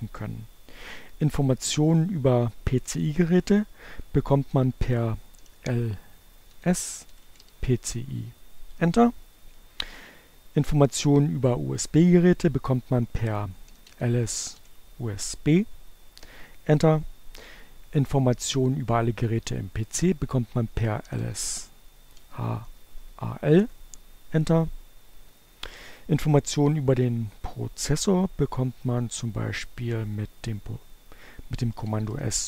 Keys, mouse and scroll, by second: 4.1 l, 4.8 s, 5.2 c, 6.1 i, 6.7 Return, 11.8-13.8 typing, 19.5-21.1 typing, 22.2 Return, 29.7-30.7 typing.